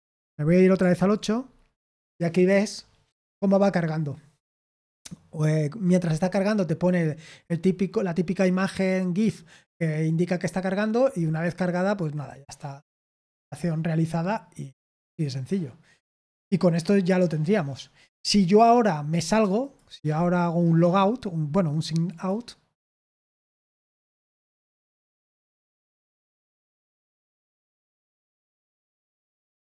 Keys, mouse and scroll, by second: 0.9 super+8, 19.6 click, 22.0 click.